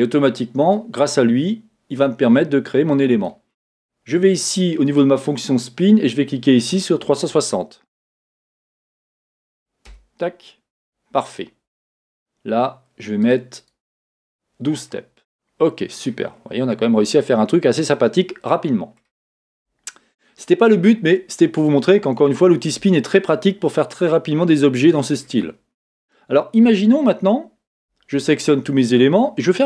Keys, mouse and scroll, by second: 9.9-15.3 drag, 11.2 Return, 14.7 scroll down 1, 15.3-29.6 middle drag, 16.1 scroll up 2, 16.3-16.7 scroll down 2, 19.3 scroll up 2, 19.5 Tab, 19.9-20.8 scroll up 3, 20.8-22.3 scroll down 2, 22.9-23.4 scroll down 2, 26.7 Tab, 27.8 a.